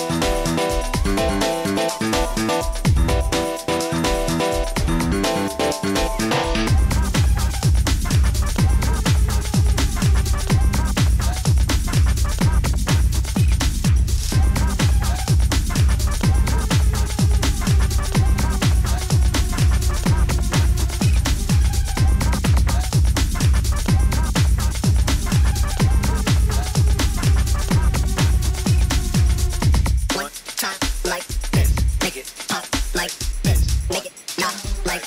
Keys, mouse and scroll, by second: 0.4 click, 2.1 click, 15.5 click, 15.9 click, 19.3 click, 21.5 h, 25.8 click, 27.2 middle click, 27.2 middle click, 29.7 click, 32.1 click.